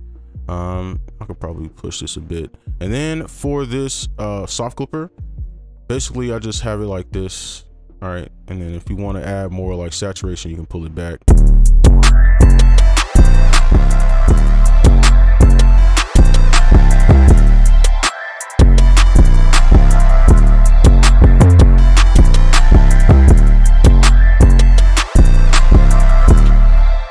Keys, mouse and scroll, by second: 5.2 double click, 20.6 typing.